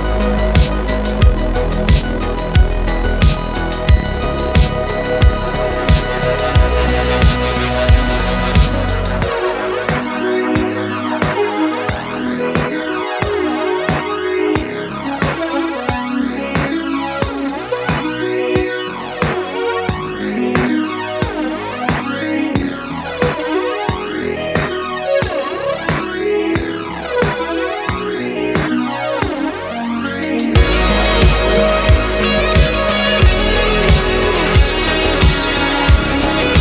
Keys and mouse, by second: 1.0 alt+a, 2.9 shift+n, 8.3-8.8 middle drag, 9.7 alt+a, 10.8-11.9 drag, 13.2 shift+middle drag, 13.4 middle click, 13.8 middle click, 14.4 click, 17.4 click, 18.4-19.7 drag, 21.6 middle click, 23.2 click, 24.3-27.5 drag, 28.8-29.7 drag, 30.4-32.6 drag, 33.4-34.2 middle drag, 35.6-36.6 drag.